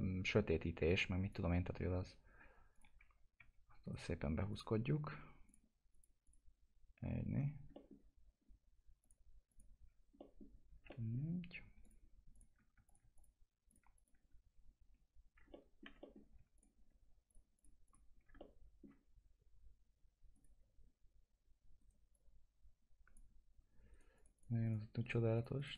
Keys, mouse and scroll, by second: 0.9 click, 3.1 scroll up 1, 3.4 1, 3.8 right click, 4.5 click, 7.7 middle click, 8.4-9.0 scroll up 1, 9.0 click, 9.8-10.2 scroll down 1, 10.2 middle click, 11.8 click, 12.8 click, 13.1 ctrl+click, 15.5 alt+middle click, 16.2 scroll down 1, 16.5 ctrl+click, 18.4 alt+middle click, 19.0-20.3 scroll up 1, 20.3 click, 21.8 right click, 22.1-23.9 drag, 23.9 right click, 24.2 click, 25.0 right click, 25.3 click.